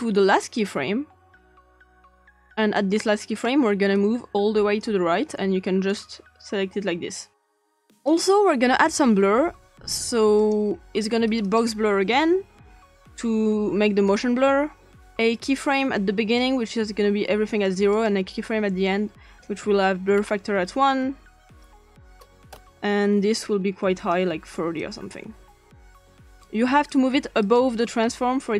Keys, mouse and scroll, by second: 0.0-0.6 drag, 2.8 click, 3.9-4.8 drag, 5.9 click, 8.1 click, 10.4 click, 11.3 click, 12.2-12.9 typing, 14.0 click, 16.4-16.7 drag, 17.9 click, 20.2 scroll up 1, 21.6 click, 22.0 click, 22.4 1, 22.5 Return, 24.0 click, 24.8 click, 25.9 click, 27.4 click.